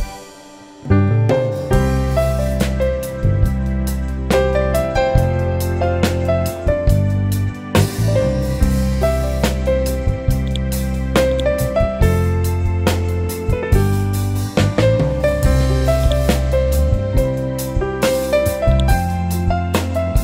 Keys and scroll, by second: 0.6 b, 1.8 Up, 2.9 Down, 8.6 Up, 16.7 Up, 17.7 Down, 18.9 Up, 19.9 Down.